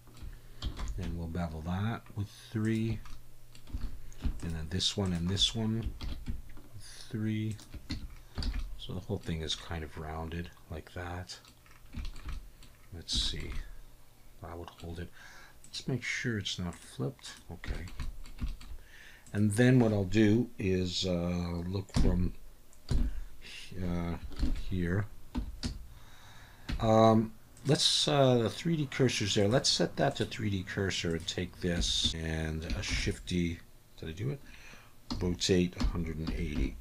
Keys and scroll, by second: 0.8 ctrl+b, 3.8 alt+a, 6.0 ctrl+b, 7.9 Tab, 8.4 alt+a, 21.9 KP_3, 22.9 KP_1, 24.4 ctrl+KP_1, 25.4 Tab, 25.6 a, 26.7 Tab, 31.8 Tab, 32.0 a, 32.9 shift+s, 35.1 r, 35.8 1, 36.2 8, 36.5 0.